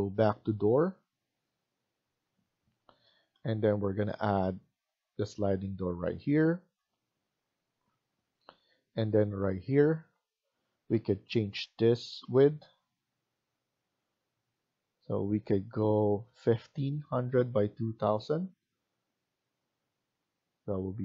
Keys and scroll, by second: 10.4 Escape, 10.6 Escape.